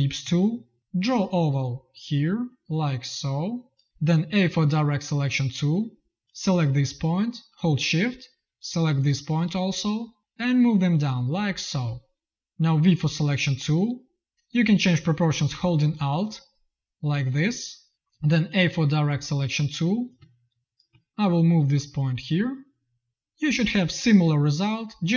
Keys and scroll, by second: 0.1 z, 3.8 z, 4.1 a, 12.7 v, 17.9 a.